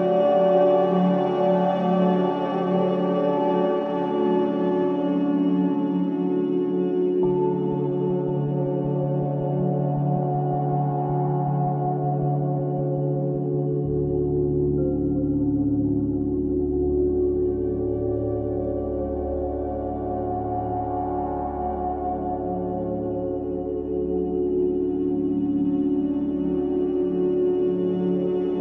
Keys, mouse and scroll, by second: 0.3 click, 3.9-4.8 drag, 5.6-7.1 drag, 9.2-10.2 drag, 10.6-15.8 drag, 15.9-17.7 scroll up 7, 17.7-20.1 right drag, 20.1-21.4 scroll down 7, 21.4 space.